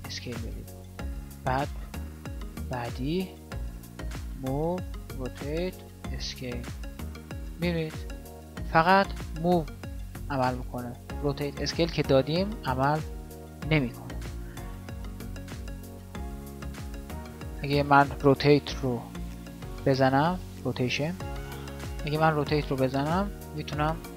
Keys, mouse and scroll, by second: 4.2 g, 5.2 r, 7.7-8.7 drag.